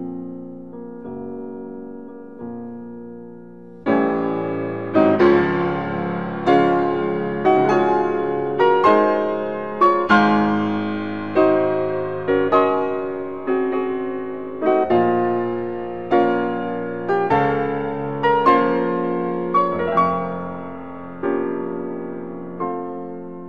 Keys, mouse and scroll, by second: 0.5 click, 1.5-9.8 middle drag, 12.1 s, 19.3 s, 21.6 click, 22.3 middle click.